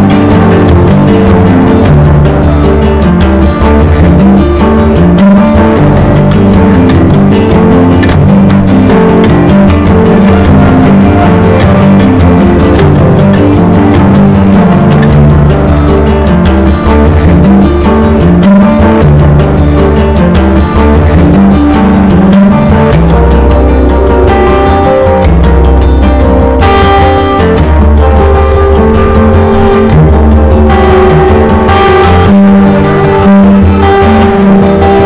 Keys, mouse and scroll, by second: 12.0 ctrl+g, 13.9 click, 15.2 Down, 15.5 Down, 17.9 click, 20.7 ctrl+v, 21.2-25.2 drag, 25.3-27.7 typing, 28.7 click, 33.2 Return, 34.1-35.0 typing.